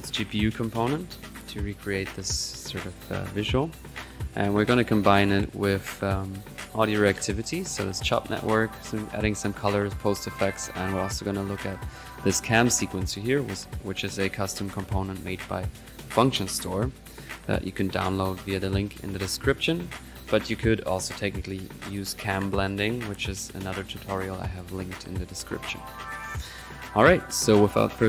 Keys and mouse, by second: 0.2 click, 3.9-4.3 middle drag, 4.5 click, 5.3 click, 5.9 right click, 7.0 click, 7.4 right click, 7.8 click, 8.4 right drag, 8.7-9.3 drag, 9.3 right drag, 9.5 drag, 9.8 right click, 10.4 click, 10.7-11.1 middle drag, 11.1 click, 11.4 click, 18.1 click, 27.6 click.